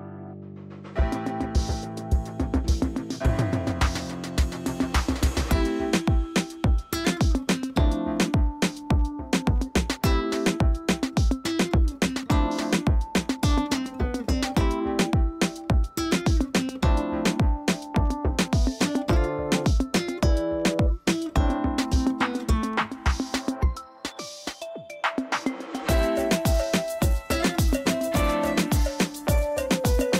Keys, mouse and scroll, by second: 7.2-8.3 scroll up 1, 8.3-9.5 drag, 22.8 p, 25.0 click.